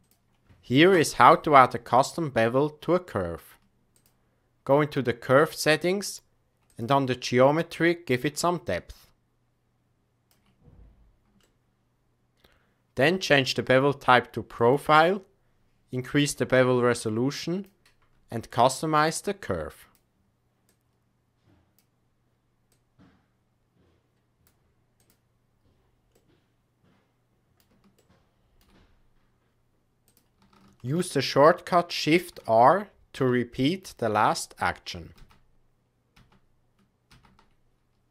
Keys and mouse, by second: 6.6 click, 8.7-10.2 shift+drag, 11.3-12.3 shift+middle drag, 14.5 click, 16.3-17.6 drag, 19.0 click, 20.7-21.7 drag, 22.6-24.4 drag, 25.0-25.3 drag, 26.1-27.5 middle drag, 27.9-28.5 shift+middle drag, 30.0 click, 30.8 shift+d, 33.1 shift+r, 34.0 shift+r, 35.1 shift+r, 36.1 shift+r, 37.0 shift+r.